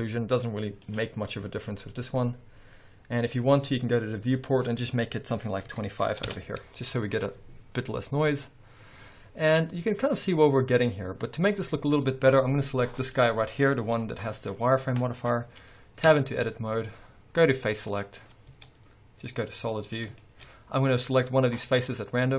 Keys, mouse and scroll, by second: 1.0 click, 2.6 scroll up 1, 3.1 scroll down 1, 4.5-13.3 drag, 6.4 Return, 9.6 scroll down 1, 14.2 scroll up 1, 16.2 Tab, 18.0 click, 18.6 z, 20.3-21.7 shift+middle drag, 21.7 click.